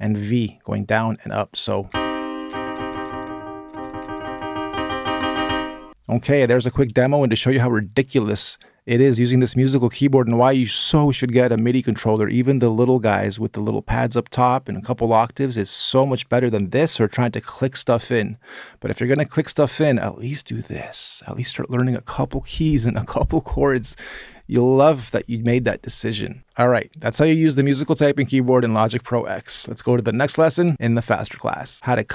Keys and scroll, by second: 1.4-5.1 typing.